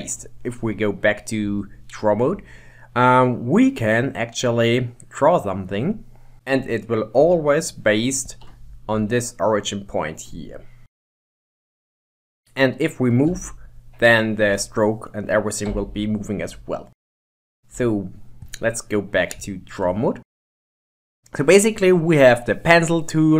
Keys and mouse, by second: 1.7 shift+middle click, 4.6-6.3 drag, 7.5 ctrl+Tab, 9.2-10.8 middle drag, 10.8 f, 11.2 KP_Decimal, 12.4-12.8 middle drag, 13.4 g, 17.3 KP_1, 17.8 ctrl+Tab, 19.5-20.8 ctrl+drag, 22.3-23.3 drag.